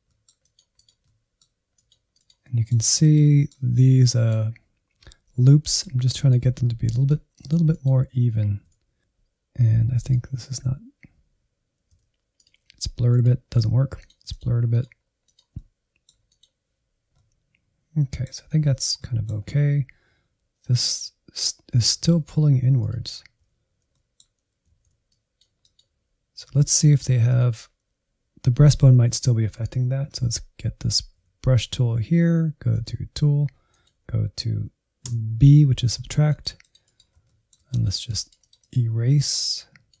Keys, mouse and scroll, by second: 0.0 click, 0.5 middle click, 1.0 click, 1.3 middle click, 1.4 scroll up 1, 1.6 middle click, 1.9 click, 2.3 middle click, 2.6 click, 2.8-4.1 middle drag, 4.1-6.6 drag, 6.8 shift+click, 7.3 shift+click, 8.6-11.5 drag, 11.8-13.4 shift+drag, 13.4 middle click, 13.6-15.1 drag, 15.1 middle click, 15.3 click, 15.6 middle click, 16.2 click, 17.0 scroll down 2, 17.2-19.4 middle drag, 19.4-19.8 scroll up 1, 22.0 alt+z, 23.0 ctrl+click, 23.8 middle click, 24.6 alt+z, 25.1-30.2 drag, 31.2 n, 32.7-37.2 drag, 37.2 shift+middle click, 37.7-40.0 drag.